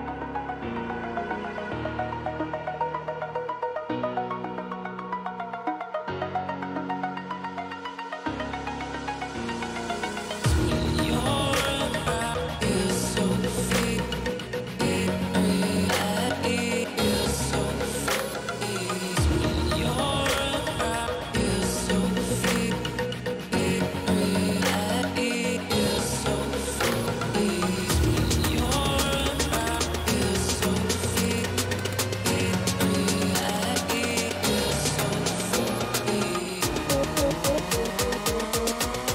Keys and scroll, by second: 3.9 ], 28.7 ctrl+o.